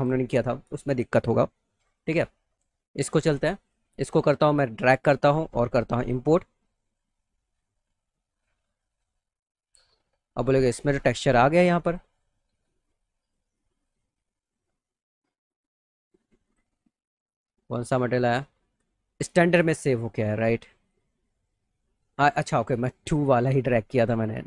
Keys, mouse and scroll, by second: 1.7 click, 1.9 click, 3.3 click, 4.6 click, 6.0 click, 10.7 click, 11.4 click, 11.8 click, 12.7 click, 13.2 click, 16.0 click, 16.4 click, 20.9 click, 22.4 click, 24.0 click.